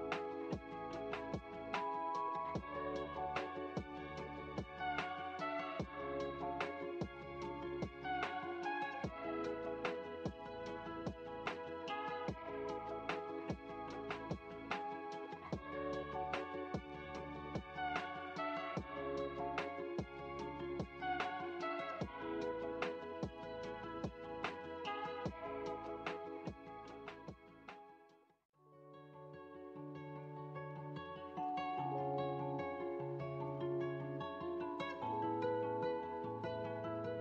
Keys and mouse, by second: 3.6 x, 7.4-8.8 drag, 9.1-10.1 drag, 23.3-26.2 drag, 27.4-29.5 middle drag, 30.9-33.0 drag, 33.9-37.2 drag.